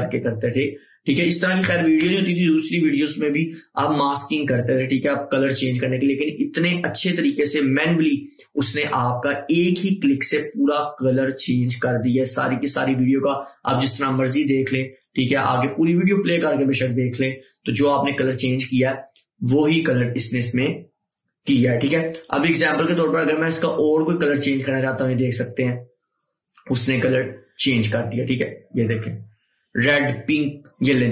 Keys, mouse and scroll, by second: 15.1-22.3 drag, 22.3-31.1 drag.